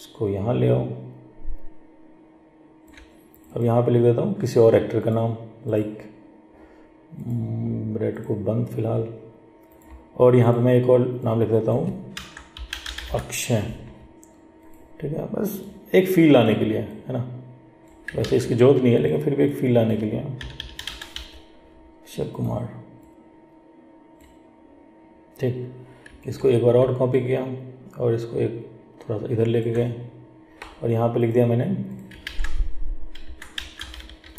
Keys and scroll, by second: 18.4 ctrl+z, 32.4 ctrl+a.